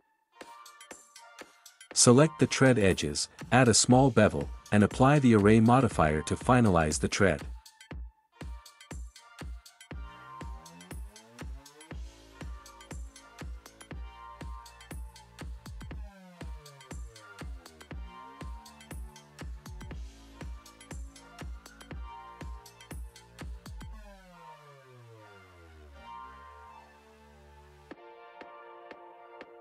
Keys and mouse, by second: 1.5 2, 2.3 click, 4.9 ctrl+b, 10.8 click, 13.3 click, 14.7 Tab, 17.1 click, 18.0 Tab, 21.0 ctrl+b, 24.9 click, 26.7 Tab, 27.9 click, 29.4 ctrl+s.